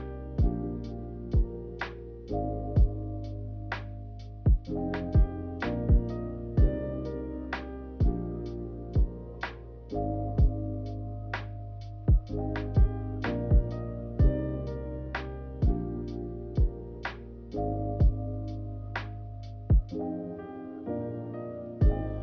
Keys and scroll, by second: 0.0 q, 7.7 a, 8.5 q, 10.7 1, 12.8 w, 15.7 ctrl+z.